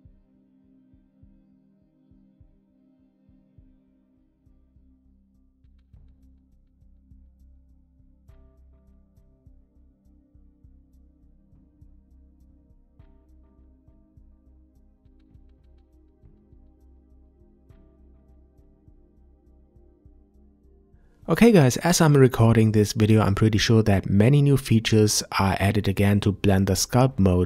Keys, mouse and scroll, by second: 2.7 scroll down 1, 3.0-4.1 middle drag, 4.1 scroll up 2, 4.4 ctrl+z, 4.6-10.6 drag, 11.8-14.4 shift+drag, 14.4-15.0 scroll down 3, 15.0-18.0 middle drag, 20.4-24.4 drag.